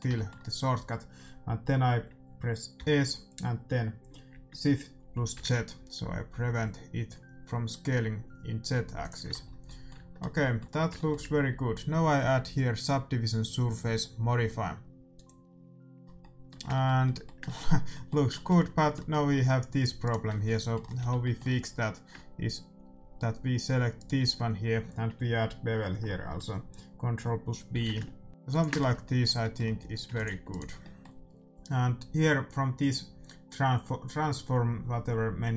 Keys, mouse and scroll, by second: 2.7 s, 9.2-12.6 middle drag, 9.9 Tab, 12.7-15.6 drag, 15.9-23.1 middle drag, 19.9-21.9 right drag, 20.2 Tab, 20.9 a, 23.9-25.8 right drag, 27.6 ctrl+b, 28.7 Tab, 28.8-32.9 middle drag, 29.7 a, 30.1 ctrl+s, 30.4-32.9 right drag.